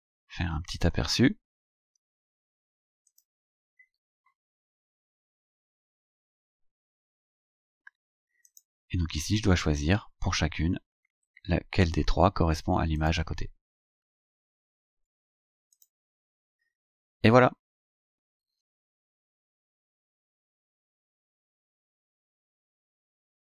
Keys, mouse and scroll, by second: 1.8 scroll down 2, 3.1 click, 8.5 click, 13.0 click, 13.5 scroll down 2, 14.0-14.3 scroll down 2, 15.8 click.